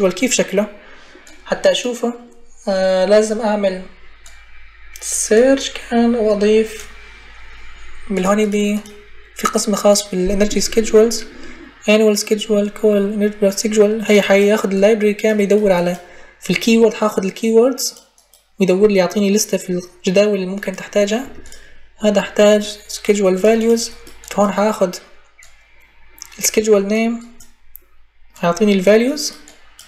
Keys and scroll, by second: 21.0 Delete.